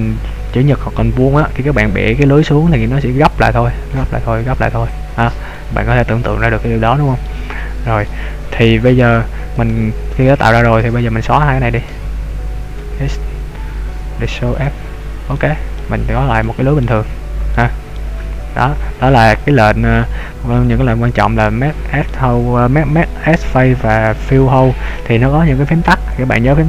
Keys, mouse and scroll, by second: 5.6 middle click, 7.7-8.0 scroll up 1, 8.1 shift+middle click, 9.7 right click, 11.9 shift+right click, 12.8 x, 15.4 middle click, 16.4 middle click, 17.6 middle click, 18.3-19.4 scroll down 3, 19.4 scroll down 1, 20.2-20.7 scroll up 2, 20.9 middle click.